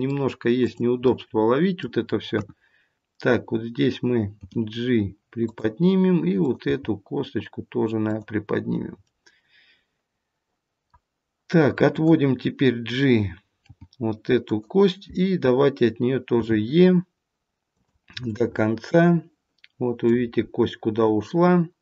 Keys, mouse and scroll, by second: 0.5 click, 0.9 middle click, 2.2 KP_1, 4.3 g, 6.3 click, 6.6 g, 9.0 middle click, 11.9 click, 13.6 g, 16.3 e, 18.2 middle click.